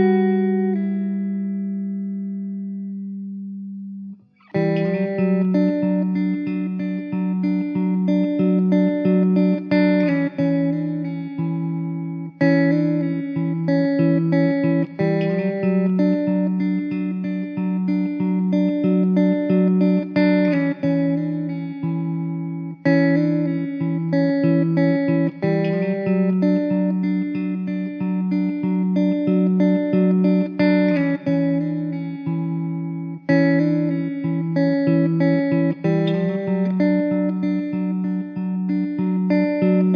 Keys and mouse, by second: 2.2 5, 8.3 alt+w, 8.9 alt+middle click, 16.7 alt+middle click, 17.0 alt+w, 17.7 middle click, 18.9 2, 23.9 1, 27.6 2, 29.8 1, 33.1 2, 36.3 1.